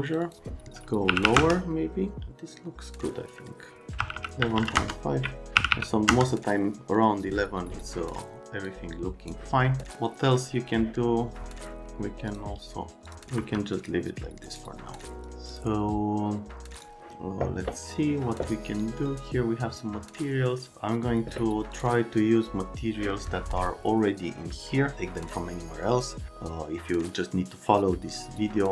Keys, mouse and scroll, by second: 0.1 click, 0.2 click, 1.1 KP_1, 1.3 KP_1, 1.3 KP_Enter, 4.0-5.7 typing, 4.7 KP_Enter, 6.1 KP_Enter, 8.6 click, 13.4 F3.